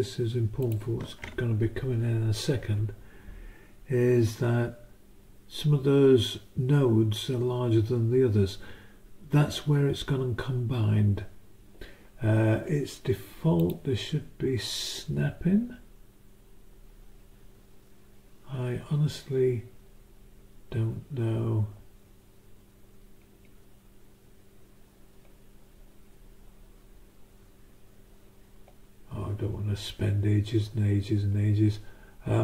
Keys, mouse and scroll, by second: 0.6 click, 13.6 click.